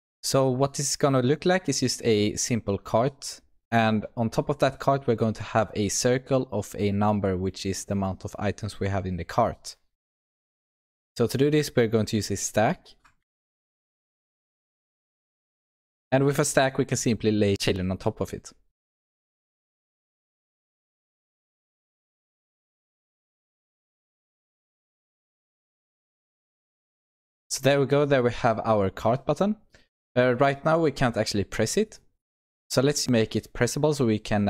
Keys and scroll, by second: 15.3 Return, 20.1 Return, 21.6 Escape, 23.4 Return, 25.5 Return, 27.3 ctrl+s.